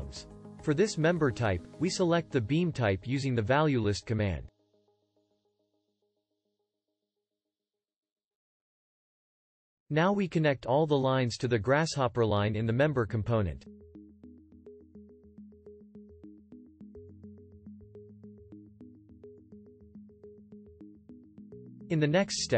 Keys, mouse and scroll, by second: 14.5-19.7 shift+drag.